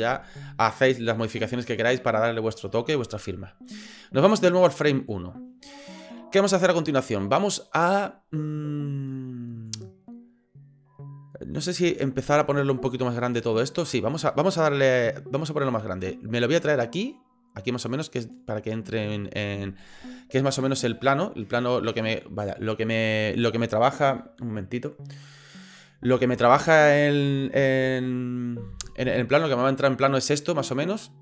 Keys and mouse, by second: 4.7 click, 9.6-12.0 drag, 15.9 middle drag, 16.7-18.3 drag.